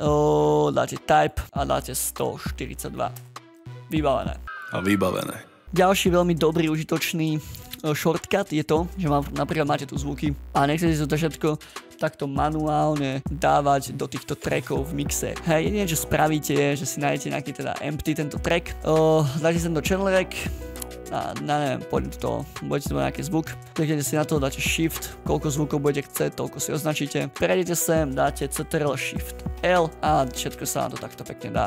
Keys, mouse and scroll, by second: 5.6 double click, 10.4 click, 13.3 scroll down 1, 13.7 scroll up 1, 17.1 double click, 18.8 double click, 27.2 shift+click, 28.5 ctrl+shift+l, 29.6 ctrl+shift+l.